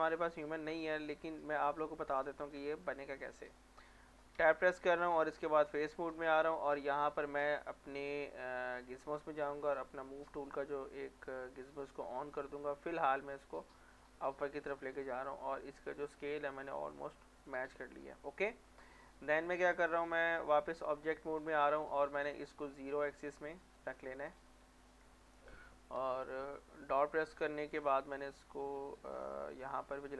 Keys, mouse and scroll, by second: 1.0 click, 3.3 middle click, 4.4 Tab, 5.9 click, 9.7 click, 10.2-11.7 scroll down 1, 11.7-13.6 drag, 13.6 scroll down 1, 13.7 middle click, 14.2-15.5 scroll up 1, 15.6 click, 16.9-18.8 middle drag, 19.1 Tab, 21.1 middle click, 22.1-23.9 drag, 23.9 middle click, 24.1 scroll down 1, 24.8 middle click, 25.2 shift+middle click, 29.2-29.5 scroll down 1, 29.5 middle click.